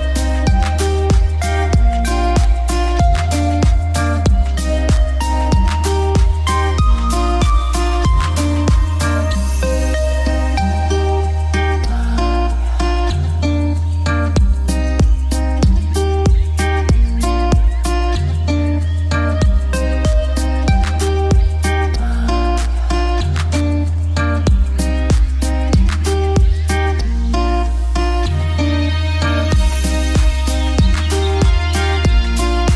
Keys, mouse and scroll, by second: 4.2-5.3 typing, 7.0 shift+click, 8.6 F2, 8.8-10.2 drag, 11.8 shift+click, 13.1 shift+click, 19.5 shift+Page_Up, 21.4 click, 24.0 alt+c, 24.2-24.7 typing, 25.1 click, 25.6 right click, 26.2 click, 30.5 click.